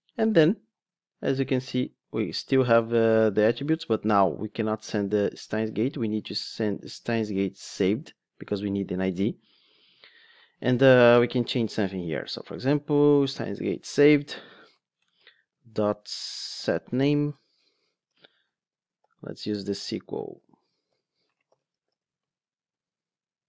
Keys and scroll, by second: 7.6 super+c, 9.7 super+v, 11.8 Tab, 13.9 Return.